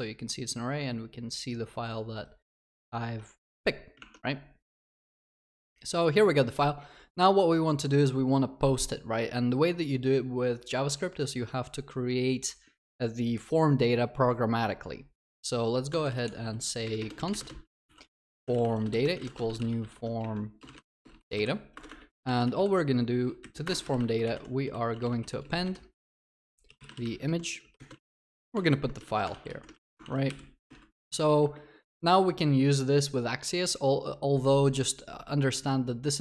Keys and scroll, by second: 23.7 Return, 28.8 ctrl+s, 29.0 ctrl+alt+shift+l, 29.3 ctrl+s, 29.7 ctrl+y, 31.0 ctrl+s.